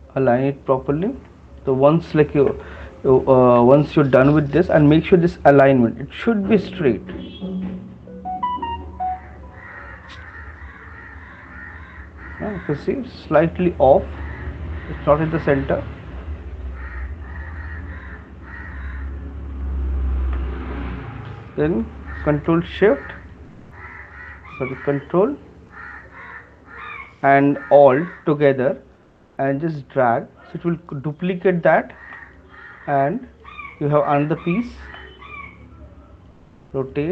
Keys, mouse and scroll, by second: 0.7 click, 1.9 shift+click, 2.7 right click, 3.2 alt+click, 3.5 right click, 10.0 click, 12.5 middle click, 13.7 click, 13.7 right click, 15.3 click, 17.0 click, 19.2 click, 19.2 right click, 20.4 right click, 21.0 click, 24.3 click, 30.6 click, 33.6 right click, 33.6 shift+click, 34.3 shift+click, 35.0 right click, 35.1 shift+click, 36.5 middle click, 36.5 click.